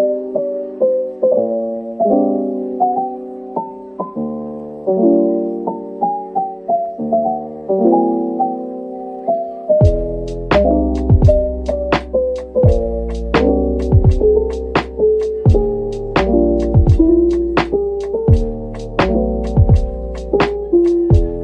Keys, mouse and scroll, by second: 2.5 middle click, 3.6 scroll down 1, 4.4 typing, 7.9 middle click, 8.7 typing, 10.2 double click, 11.1 middle click, 12.8 shift+click, 13.8 typing, 15.5 middle click, 16.6 right click, 19.8 ctrl+b.